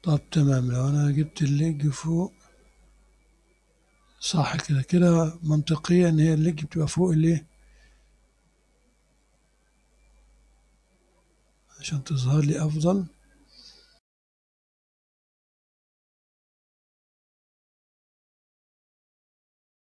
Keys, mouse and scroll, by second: 1.5-13.1 drag, 13.1-14.2 middle drag, 14.2 click, 14.3 middle click, 14.5 click, 15.5 middle click, 15.6 click, 16.2-17.2 scroll up 1, 17.2 click, 17.7-18.3 scroll up 1, 18.3 click, 18.6 scroll up 1, 18.8 click, 19.4 scroll up 1, 19.5 click.